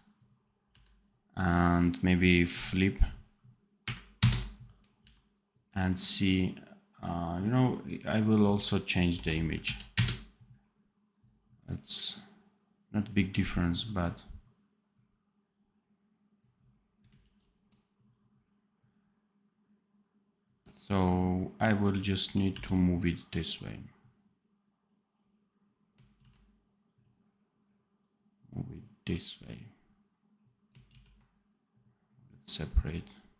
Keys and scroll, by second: 0.6 v, 4.9 v, 17.1 ctrl+b, 22.4 v, 26.1 ctrl+z, 30.8 ctrl+z.